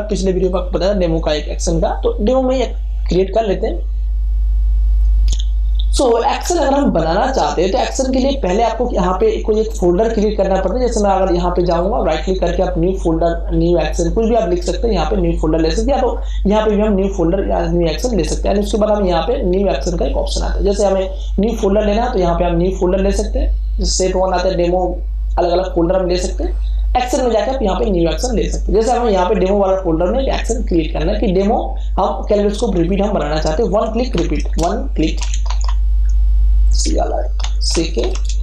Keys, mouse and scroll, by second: 11.8 click, 21.2 click, 26.1 click, 31.3 click, 34.4-38.4 typing.